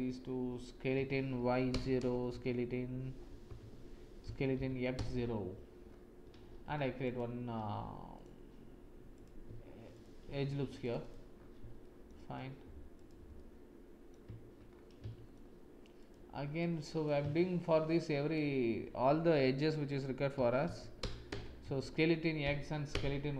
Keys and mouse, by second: 0.9 s, 2.2 x, 4.2 s, 6.6 ctrl+r, 8.1 click, 9.8 click, 10.4 ctrl+r, 11.8 shift+middle click, 11.8 shift+click, 12.0 shift+middle click, 13.3 middle click, 15.0 shift+middle click, 16.0 shift+click, 16.6 click, 17.0 shift+middle click, 17.6 shift+click, 20.3 s, 21.6 s.